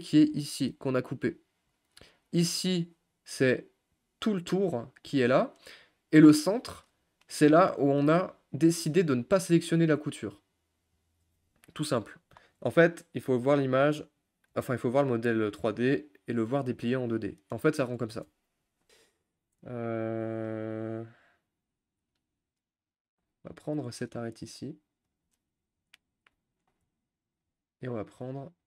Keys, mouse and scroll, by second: 7.2 middle click, 7.8 scroll down 1, 7.9 shift+middle click, 8.3-8.8 scroll up 5, 8.8-15.5 middle drag, 19.9 scroll up 1, 19.9-23.2 middle drag, 23.6 click, 25.2 click, 26.6 shift+click, 26.9 middle click, 27.8 shift+click.